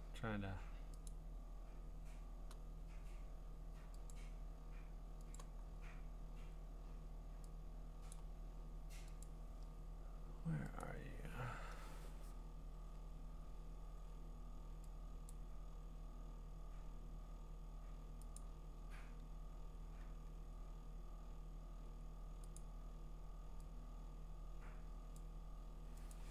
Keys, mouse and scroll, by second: 1.1 click, 4.1 click, 5.3 click, 5.6-8.1 scroll, 8.1 click, 9.2 click, 11.0-12.8 scroll, 12.8-13.3 scroll, 15.3 click, 15.9-17.3 scroll, 18.4 click, 18.7-21.8 scroll, 21.8-22.2 scroll, 22.6 click, 22.9-24.6 scroll, 25.1 click, 26.1 click.